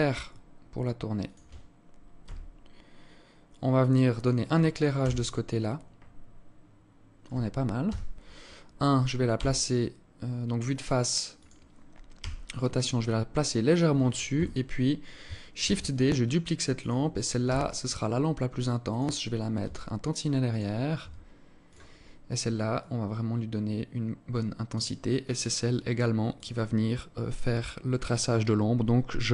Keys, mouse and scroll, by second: 1.8 g, 4.5 KP_0, 7.4 KP_1, 8.9 g, 11.7 r, 13.8 KP_7, 15.1 shift+d, 17.0 r, 19.1 g, 20.5 r, 22.3 click, 25.8 click.